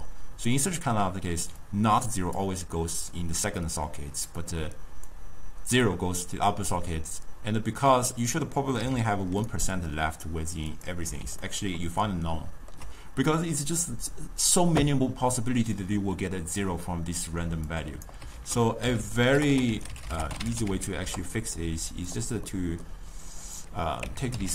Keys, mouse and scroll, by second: 1.7-7.5 drag, 8.9 m, 10.8 click, 11.5-17.8 ctrl+middle drag, 17.8 click, 18.5 ctrl+a, 19.5 t, 22.5 middle click, 23.5-24.5 drag.